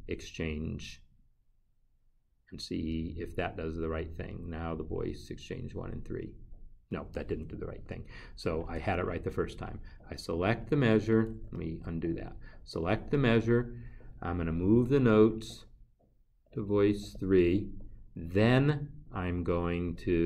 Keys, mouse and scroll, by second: 6.9 click, 10.7 click, 15.0 click, 17.2 click.